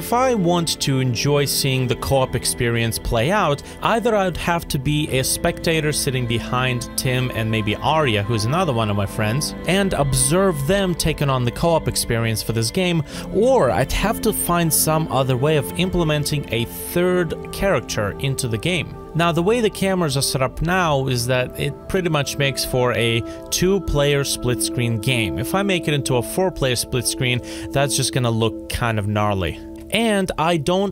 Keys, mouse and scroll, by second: 15.1 alt+click.